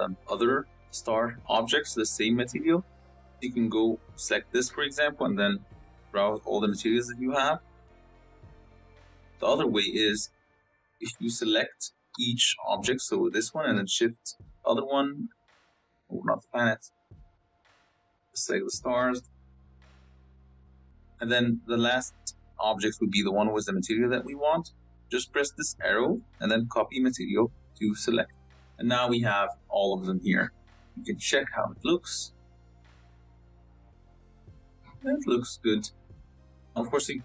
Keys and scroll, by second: 20.4 ctrl+z, 32.4 z.